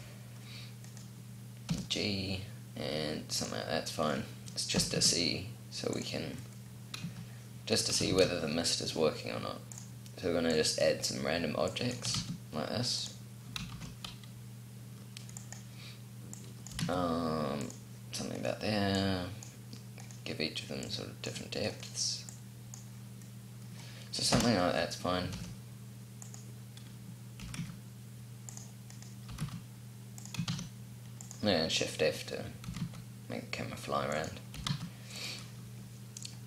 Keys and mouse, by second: 0.8 click, 1.6 g, 4.0 click, 4.7 g, 6.3 click, 8.0 shift+a, 12.0 g, 13.6 shift+d, 16.6 g, 18.3-19.9 drag, 23.9 middle click, 24.3 KP_0, 25.2 shift+f, 27.3 g, 29.2 g, 30.4 shift+f, 32.6 g, 34.4 g, 35.5-36.4 drag.